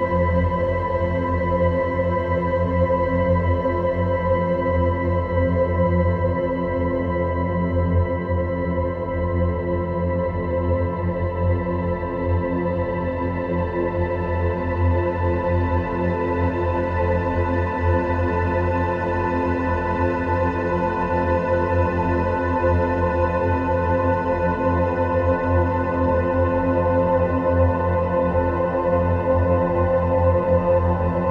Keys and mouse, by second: 9.9 r, 12.5 g, 13.8 r, 15.3 g, 18.0 middle click, 18.8 click, 19.7 a, 21.1 Tab, 21.6 a, 22.7 Tab, 23.7 click, 24.6-29.2 middle drag.